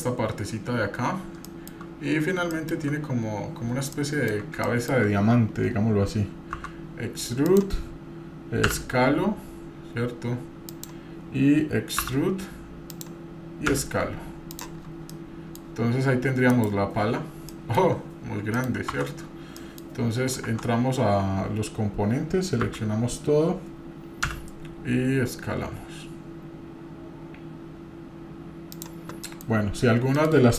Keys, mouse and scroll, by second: 0.3 scroll down 2, 1.0 scroll down 1, 1.4 shift+middle click, 1.8-2.5 scroll up 3, 2.5 shift+middle click, 3.9 shift+middle click, 6.6 e, 14.8-15.1 scroll down 3, 15.1-15.6 middle drag, 15.6 scroll up 1, 16.5 scroll up 2, 17.0-17.6 scroll down 4, 17.5 middle click, 18.0-18.6 scroll up 1, 18.6 middle click, 18.9 Tab, 19.6 middle click, 20.4 Tab, 20.4-21.2 scroll up 1, 22.7 a, 29.3 middle click, 30.1 middle click.